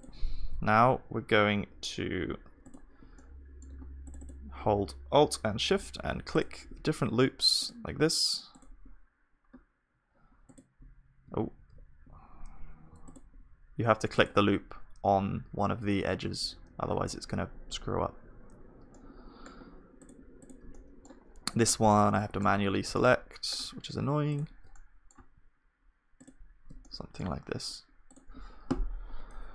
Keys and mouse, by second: 0.0 ctrl+r, 0.0-2.3 drag, 3.1-6.2 drag, 3.1 right click, 3.6-6.2 right drag, 7.6-12.5 drag, 11.6 ctrl+z, 18.9-24.7 middle drag, 20.8-26.4 drag, 24.7-26.9 right drag, 26.9-29.5 middle drag, 27.0-29.5 drag.